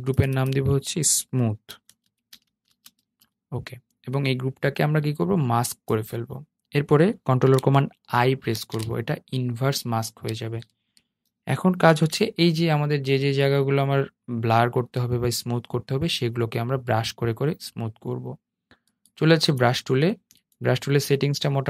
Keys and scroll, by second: 7.6 super+i, 11.0 super+0.